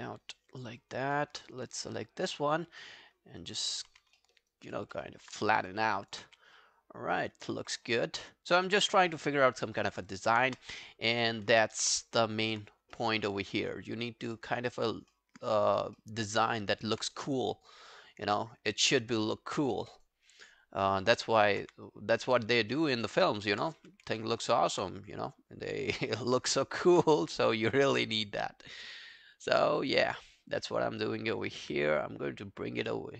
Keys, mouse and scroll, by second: 1.2 alt+middle click, 2.7 r, 3.9 w, 4.2 alt+middle click, 4.4 alt+right click, 4.6 alt+click, 5.0 alt+middle click, 6.0 alt+click, 7.5 alt+middle click, 7.8 alt+scroll down 1, 8.0 alt+click, 9.1 alt+middle click, 9.7 alt+middle click, 9.9 alt+right click, 10.1 alt+click, 10.5 space, 11.5 space, 12.2 alt+middle click, 12.7 alt+scroll down 1, 13.3-13.6 alt+scroll down 1, 14.3 scroll up 1, 14.6 alt+middle click, 14.9 alt+scroll down 1, 15.1 alt+middle click, 16.0 alt+middle click, 16.2 alt+right click, 16.5 alt+middle click, 17.2 space, 18.3 space, 18.8 alt+middle click, 19.1 alt+right click, 19.4 alt+click, 19.7 alt+middle click, 20.0 alt+right click, 20.2 alt+click, 20.7 alt+click, 21.0 alt+middle click, 21.3 alt+right click, 21.6 q, 22.8 alt+middle click, 23.0 alt+right click, 23.2 alt+click, 23.8 r, 24.2 alt+middle click, 24.4 alt+right click, 26.3 alt+click, 27.1 w, 29.0 alt+scroll down 1, 29.2 alt+click, 29.6 alt+middle click, 29.8 alt+right click, 30.1 alt+click, 33.0 alt+click.